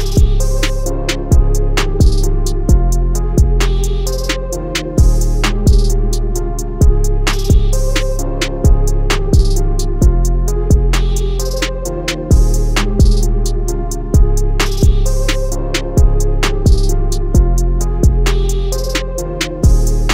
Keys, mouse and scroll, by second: 1.5 click, 13.7 right click, 15.6 click.